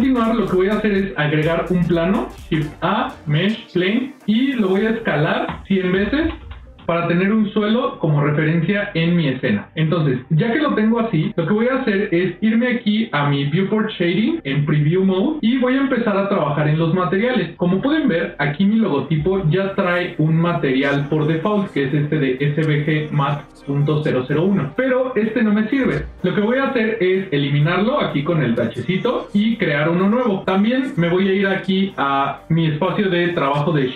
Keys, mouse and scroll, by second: 0.2 ctrl+middle click, 0.5 ctrl+middle click, 2.4 shift+a, 5.3 s, 9.5 ctrl+middle click, 10.4 ctrl+middle click, 14.8 click, 15.3 middle click, 15.4 scroll down 2, 15.6 scroll up 2, 15.7 shift+middle click, 15.7 shift+scroll down 1, 17.4 click, 20.4 click, 26.0 click, 28.3 click, 29.8 click.